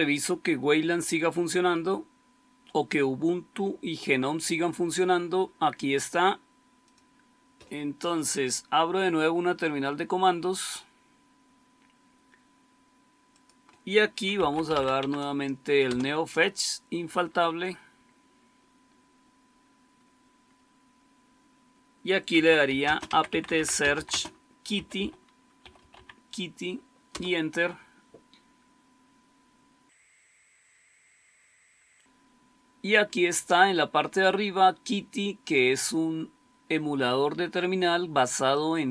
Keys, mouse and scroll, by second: 14.0-15.1 typing, 15.7 Return, 22.0-26.3 typing, 27.0 Return.